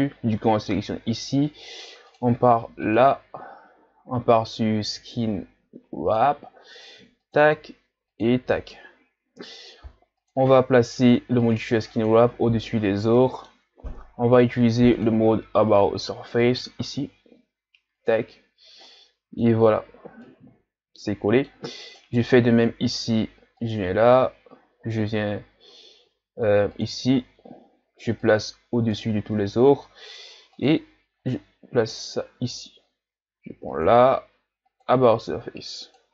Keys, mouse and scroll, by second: 2.1-5.9 drag, 7.2 click, 10.2-12.1 drag, 13.2-13.8 middle drag, 13.8-14.7 scroll up 1, 14.7 scroll up 1, 15.0-18.9 drag, 18.9 middle click, 19.5-20.3 scroll up 5, 20.3-22.0 middle drag, 22.0 right click, 23.6-26.6 drag, 28.3-29.0 drag, 30.5 click, 33.7-36.1 drag.